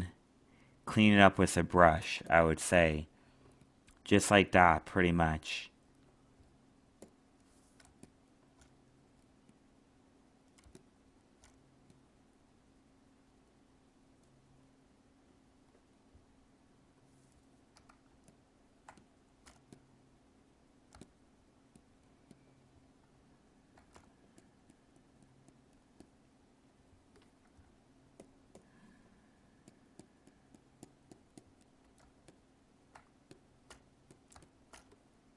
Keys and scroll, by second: 18.0 alt+space, 23.0 alt+space, 32.0 alt+space.